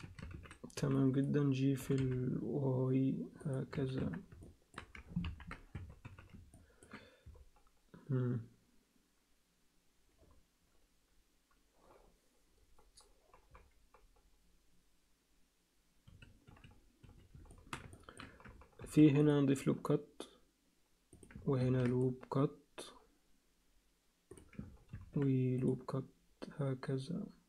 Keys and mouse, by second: 0.0 a, 0.8 b, 1.8 g, 3.7 z, 4.0 Tab, 4.4 alt+middle click, 5.2 ctrl+KP_1, 5.7 Tab, 6.0 z, 6.5 ctrl+alt+middle click, 16.0 z, 16.5 z, 17.0 z, 17.5 alt+shift+middle click, 17.9 ctrl+alt+middle click, 18.8 ctrl+r, 21.6 ctrl+r, 24.9 ctrl+r.